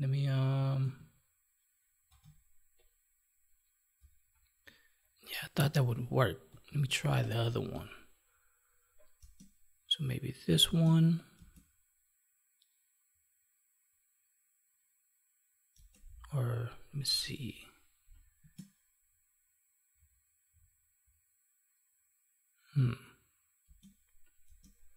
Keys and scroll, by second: 0.7 ctrl+Tab, 6.8 alt+Tab, 9.1 space, 10.6 space, 15.7 space, 18.3 space, 23.6 space.